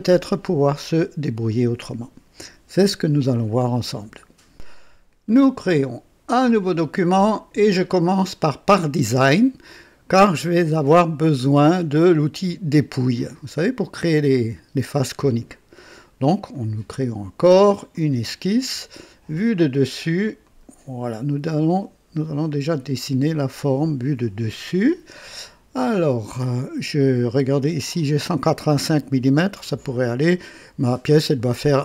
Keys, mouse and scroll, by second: 6.4 click, 16.5 click, 17.9 click, 19.5 click, 20.4 click, 22.2-23.1 right drag, 26.3 right click, 29.6-30.5 right drag.